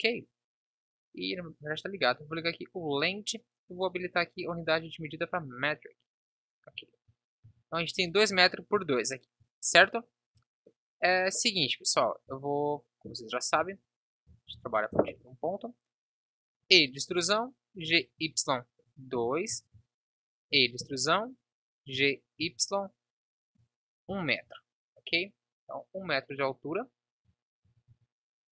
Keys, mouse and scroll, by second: 7.4 n, 10.8-12.7 drag, 13.6 Delete, 14.6 Up, 16.5 e, 17.9 g, 19.7 a, 20.5 e, 24.4 Tab, 27.6 a.